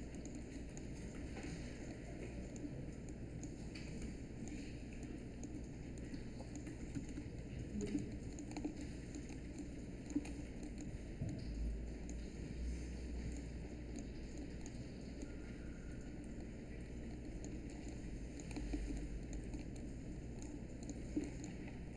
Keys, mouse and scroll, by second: 6.9 space.